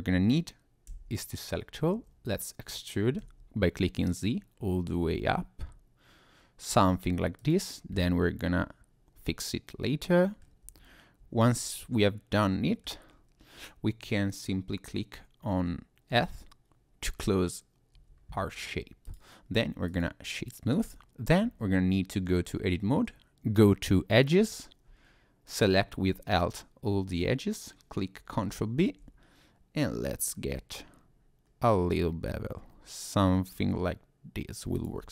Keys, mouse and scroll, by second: 0.9 a, 1.9 e, 3.2 z, 7.4 click, 8.0-8.9 scroll down 1, 9.3 middle click, 10.6 Tab, 11.2 Tab, 11.5 middle click, 13.1-13.5 scroll up 2, 13.5-14.7 scroll down 1, 16.1 f, 17.9 Tab, 19.0 right click, 20.7 Tab, 21.4 Tab, 24.5 alt+click, 28.8 ctrl+b, 30.3-31.0 scroll up 4, 31.4-33.3 scroll up 2, 34.8 click.